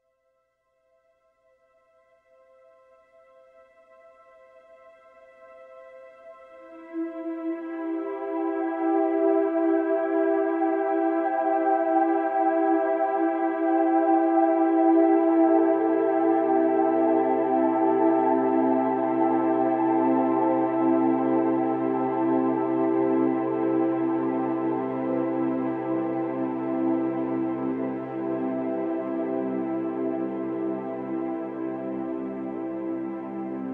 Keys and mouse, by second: 0.8 click, 1.0 alt+middle click, 1.6 alt+middle click, 2.0 5, 2.2-3.2 drag, 2.2 f, 3.2 middle click, 3.4 click, 4.0-5.2 drag, 4.0 f, 5.6 f, 5.8 click, 6.0 alt+middle click, 6.6 2, 6.8 f, 7.0 click, 7.2 middle click, 7.4 click, 7.8 alt+middle click, 8.2 8, 8.2 f, 8.4 ctrl+click, 9.2 alt+middle click, 9.6-11.6 typing, 9.8 click, 10.6 click, 11.4 click, 12.6 click, 13.0 click, 13.4 alt+middle click, 13.8 alt+shift+middle click, 14.6 alt+middle click, 14.8 click, 14.8 f, 15.6 click, 16.4 click, 16.8-17.8 drag, 17.8 middle click, 18.8 3, 19.0 f, 19.4 f, 19.8 click, 20.0 f, 20.4 click, 21.8 click, 23.0 click, 23.8 click, 25.2 middle click, 25.8 f, 26.2 click, 26.6 f, 27.0 alt+middle click, 27.6 5, 27.8 click, 27.8 f, 28.4 click.